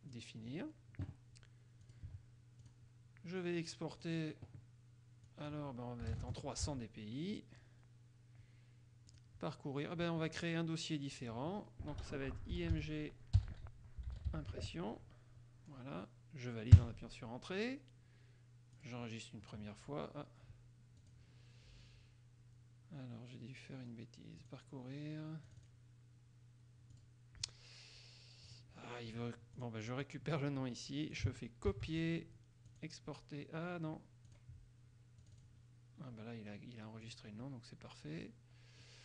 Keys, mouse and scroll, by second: 0.3 click, 2.0 click, 2.8 click, 4.1 click, 5.5 click, 6.2 KP_3, 6.5 KP_0, 6.8 Tab, 9.3 click, 11.3 click, 12.6 i, 12.9 g, 13.9-15.0 typing, 16.9 KP_Enter, 18.9 click, 21.1 click, 24.5 click, 25.7 click, 27.1 click, 28.7 click, 29.7 click, 30.2-31.5 drag, 31.9 ctrl+c, 32.9 click, 34.5 click, 35.4 click, 37.2 click.